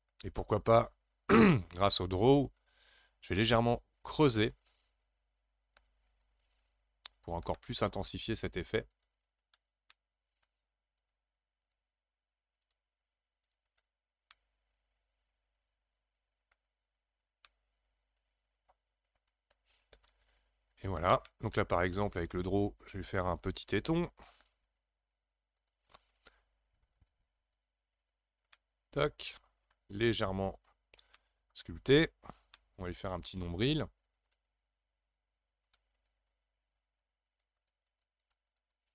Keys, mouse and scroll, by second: 1.3-1.9 scroll up 5, 1.9 click, 2.4-4.1 scroll up 2, 4.1-7.6 ctrl+drag, 7.6 middle click, 8.5-9.9 ctrl+drag, 9.9-11.0 middle drag, 11.0-14.1 ctrl+drag, 14.1 scroll down 3, 14.3-16.9 middle drag, 16.9-17.5 scroll down 5, 17.5-20.5 middle drag, 20.8-21.3 scroll up 1, 21.3-22.4 shift+middle drag, 22.4-24.5 scroll up 4, 24.5 f, 25.6 f, 26.9-28.5 drag, 28.5-31.9 middle drag, 31.9 scroll up 3, 32.6-34.5 shift+middle drag, 34.5-38.9 ctrl+drag.